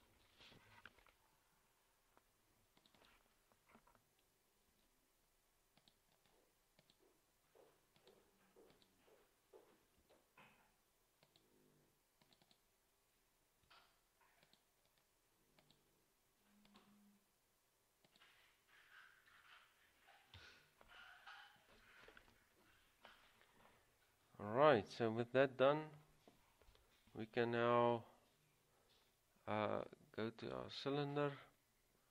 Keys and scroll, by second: 4.9 ctrl+c, 10.1 ctrl+v, 13.8 ctrl+c, 19.5 ctrl+v, 20.5 Return.